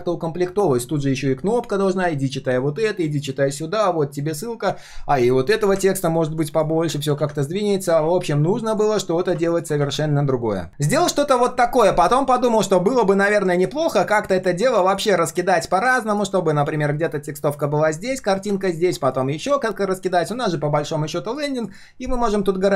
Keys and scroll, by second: 7.1 ctrl+z.